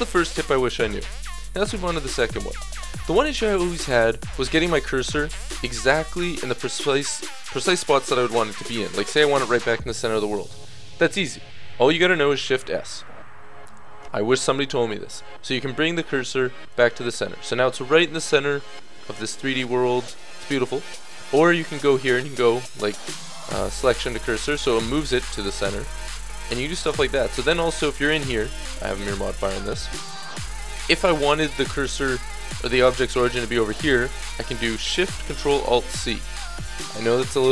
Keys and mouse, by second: 2.5 click, 2.7-4.1 middle drag, 4.4-7.3 middle drag, 9.7-12.4 middle drag, 12.4 shift+s, 19.3-20.1 middle drag, 20.8-23.0 middle drag, 21.9 shift+s, 26.1 ctrl+z, 26.8 ctrl+z, 27.5 Tab, 29.5 a, 35.8 ctrl+alt+shift+c.